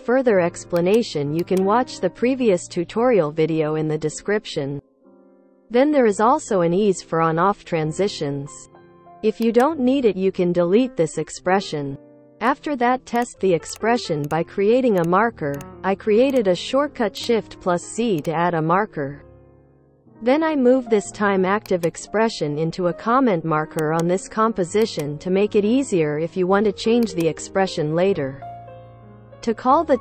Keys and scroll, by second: 13.6 shift+z, 14.0 shift+z, 14.6 shift+z, 16.0 shift+z, 22.4 shift+z, 25.6 ctrl+v, 29.9-30.0 typing.